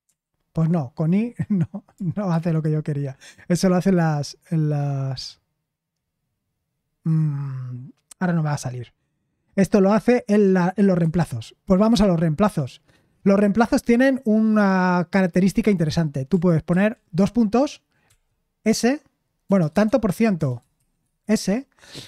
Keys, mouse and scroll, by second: 0.0 n, 2.3 /, 11.0 Escape, 18.0 s, 19.4-21.2 typing.